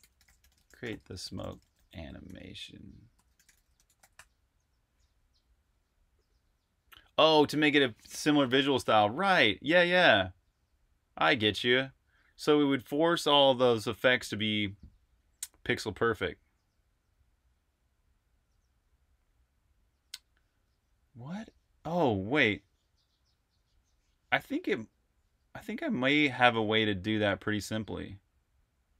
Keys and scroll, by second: 0.0-0.5 typing, 3.0-3.9 typing.